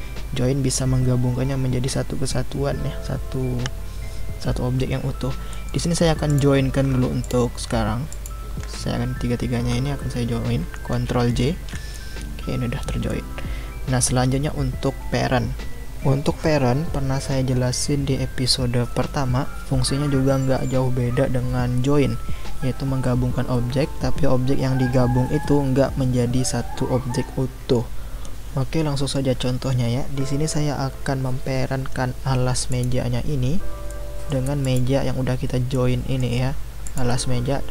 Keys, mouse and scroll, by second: 5.5-6.3 middle drag, 6.3 click, 7.2 shift+click, 8.1 shift+click, 11.4 ctrl+j, 13.1-15.6 middle drag, 32.7 click, 33.9-34.6 middle drag, 34.6 click, 35.7-36.8 middle drag, 36.8 click.